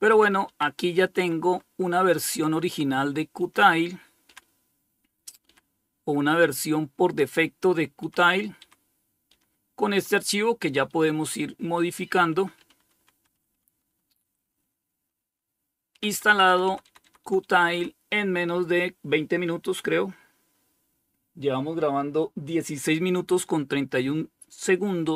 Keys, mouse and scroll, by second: 0.4 Page_Down, 0.7 Page_Down, 1.8 Page_Down, 2.6 Page_Down, 3.5 Page_Down, 7.2 Page_Down, 7.8 Page_Down, 9.2 Page_Down, 9.9 Page_Down, 10.2 Page_Down, 11.5 Page_Up, 11.8 Page_Up, 12.0 Page_Up, 12.1 Page_Up, 12.4 Page_Up, 12.6 Page_Up, 12.7 Page_Up, 13.3 Page_Up, 13.5-14.6 Page_Up, 15.1 Page_Down, 15.3 Page_Down, 15.5 Page_Down, 15.7 Page_Down, 16.3 Page_Down, 16.9 Page_Down.